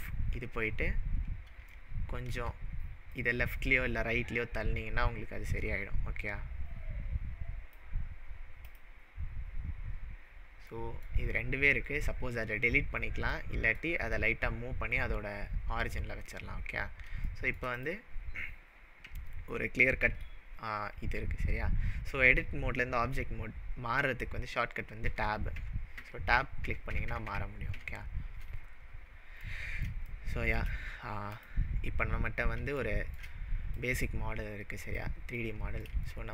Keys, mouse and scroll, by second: 0.9-1.8 scroll down 5, 1.8-2.8 shift+middle drag, 3.2-7.7 click, 8.0-8.6 scroll down 6, 8.7 click, 10.8-11.3 middle drag, 15.5-17.1 scroll down 8, 17.3 shift+middle click, 17.8 click, 20.2 Escape, 25.0 Tab, 25.7 Tab, 26.0 Tab, 26.4 Tab, 26.7 Tab, 26.9 Tab, 27.1 Tab, 27.3 Tab, 27.8 Tab, 28.5-29.3 scroll down 6, 29.5-30.0 middle drag, 31.4 click, 32.9-34.9 shift+middle click, 33.7 click, 35.5-35.9 middle drag.